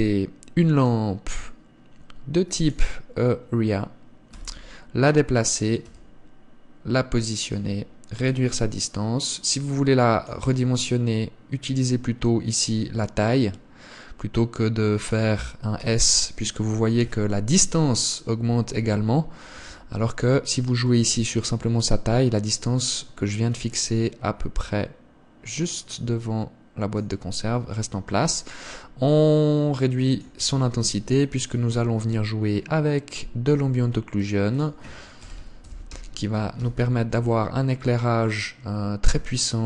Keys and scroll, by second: 0.1 shift+a, 4.7 g, 6.2 r, 16.2 s.